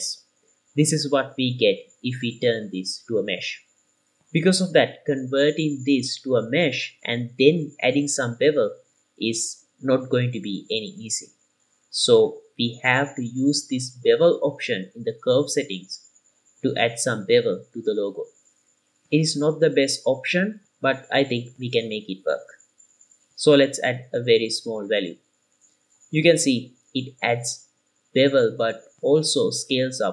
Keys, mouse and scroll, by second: 0.5 scroll up 2, 1.1-3.9 middle drag, 4.2 z, 5.2-24.0 middle drag, 24.0 click, 24.7 KP_0, 27.1-28.0 middle drag, 28.3 scroll up 1, 28.8 shift+middle click, 29.5 click.